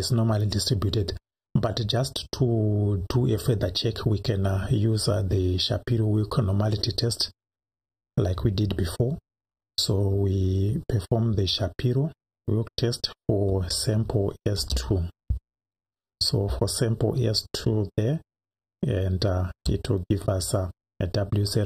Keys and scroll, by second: 10.1 Up, 11.3 Up, 13.5 Left, 14.6 BackSpace, 15.3 2, 16.5 Right, 19.5 Return.